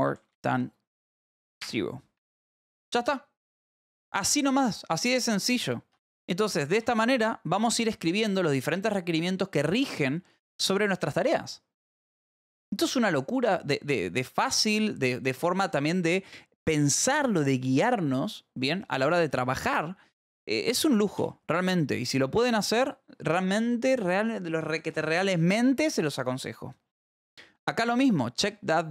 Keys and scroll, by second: 0.0-1.6 typing, 2.1 Escape, 3.2 ctrl+s, 6.4 shift+v, 6.8 y, 7.8 j, 21.6 p.